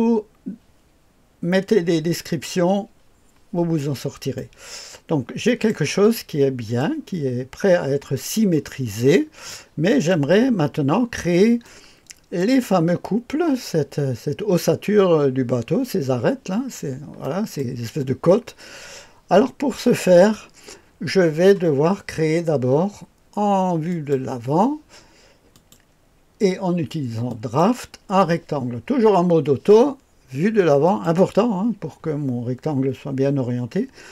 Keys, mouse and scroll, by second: 3.8-4.3 scroll up 1, 4.3-5.7 right drag, 6.1-7.4 right drag, 8.8-9.5 scroll down 1, 9.5-10.1 right drag, 11.6-12.9 drag, 17.2-17.6 right drag, 23.9 click, 25.5 click, 27.3 click, 30.8 click.